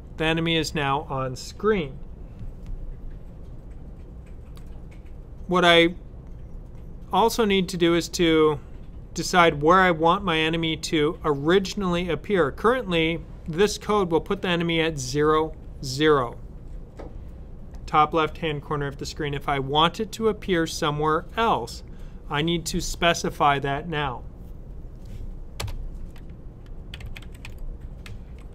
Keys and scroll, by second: 26.6-28.5 typing.